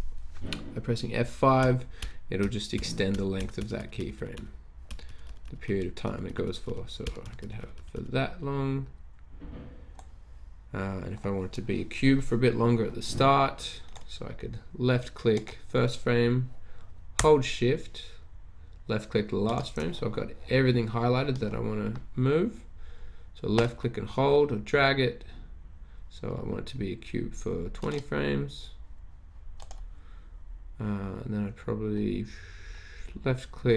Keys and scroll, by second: 1.6 F5, 2.0 F5, 2.8 F5, 3.2 F5, 3.4-3.7 F5, 4.3 F5, 4.9 F5, 5.0 F5, 5.2 F5, 6.0 F5, 6.2 F5, 6.6 F5, 7.2-8.0 typing.